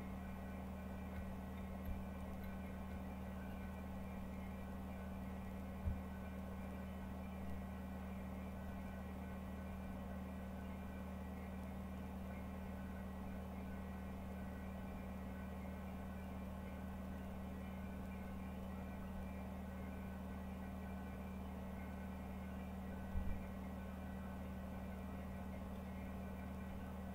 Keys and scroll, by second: 0.0 Down, 0.2 Down, 1.1 Down, 1.5 Down, 1.8 Down, 2.1 Down, 2.4 Down, 2.6 Down, 2.9 Down, 3.4 Down, 4.0 Down, 5.8 Home, 6.3-9.6 Up, 9.6 Page_Down, 14.7 Page_Down, 18.9 Page_Down, 23.1 Page_Down.